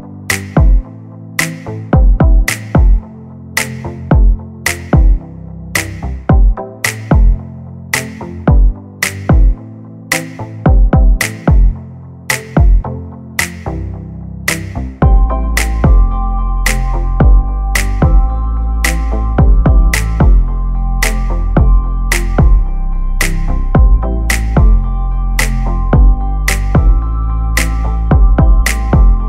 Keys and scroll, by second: 0.8 space, 1.5 m, 3.0 space, 3.2 p, 4.0 5, 4.3 Return, 4.7 space, 7.1 r, 10.5-12.2 typing, 16.7 space, 17.6 m, 19.0 space, 19.3 p, 19.9 space, 24.5 l, 26.8 space, 27.1 p, 27.9 space, 28.0 Escape.